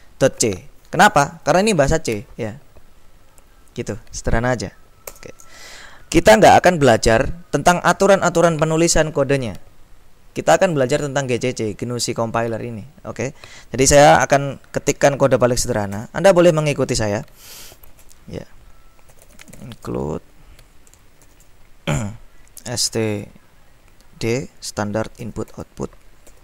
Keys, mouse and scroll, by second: 5.2 Return, 16.1 i, 18.1-20.3 typing, 21.4 shift+,, 22.5-23.6 typing, 25.3-26.4 typing.